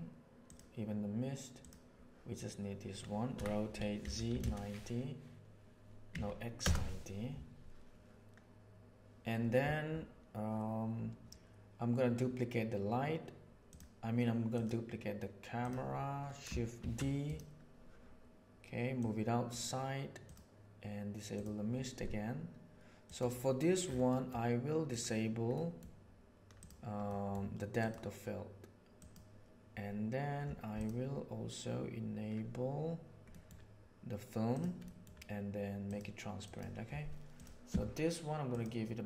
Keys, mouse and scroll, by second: 0.4 right click, 1.5 right click, 3.3 r, 14.5 middle click, 15.6 middle click, 16.7 shift+d, 17.2-17.7 drag, 18.9-19.4 right drag, 20.2 right click, 21.3 right click, 23.0 right click, 24.0 middle click, 24.8 click, 25.6 middle click, 26.5 click, 27.0 middle click, 27.7 click, 28.9 click, 30.7 click, 33.4 middle drag, 34.5 drag, 34.8 middle click, 35.8 click, 36.4 drag.